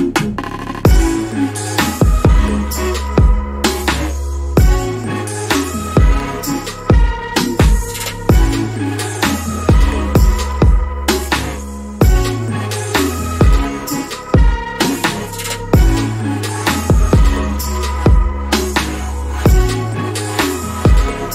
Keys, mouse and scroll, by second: 0.6 click, 1.0 double click, 1.8 right click, 2.4 click, 2.9 double click, 7.0 click, 13.2 scroll up 1, 14.1 click, 14.6 scroll down 2, 14.8 alt+click, 20.8 click.